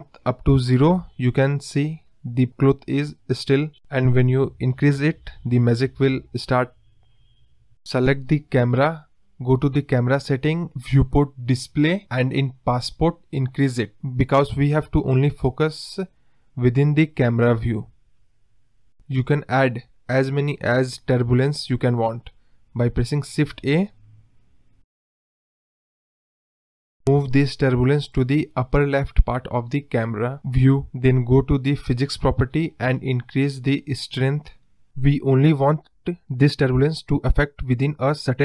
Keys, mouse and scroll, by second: 2.3 Left, 2.3-3.5 drag, 3.5 KP_0, 8.7 click, 9.4 click, 9.7 scroll down 1, 10.4 click, 10.6 scroll down 6, 11.3-12.8 drag, 21.6 space, 21.9 scroll down 2, 22.0-22.6 scroll up 2, 22.6 shift+a, 23.8 scroll down 1, 23.9 middle drag, 24.2 scroll up 1, 24.2-24.6 middle drag, 24.6 scroll down 1, 24.6-25.0 middle drag, 25.0 scroll up 1, 25.1 scroll down 2, 25.3-25.8 middle drag, 25.8 KP_7, 26.1 scroll up 2, 26.2-26.7 scroll down 1, 26.7 KP_0, 27.0-27.5 scroll up 2, 28.2 g, 31.7 click, 32.6-33.7 drag, 33.7 KP_0, 35.1-35.7 scroll down 3, 35.7 middle drag, 36.0 scroll up 2, 36.1 middle drag, 36.4-36.7 scroll down 6, 36.7-37.1 middle drag, 37.1-37.6 scroll up 1, 37.6-37.9 scroll up 1, 37.9-38.4 middle drag.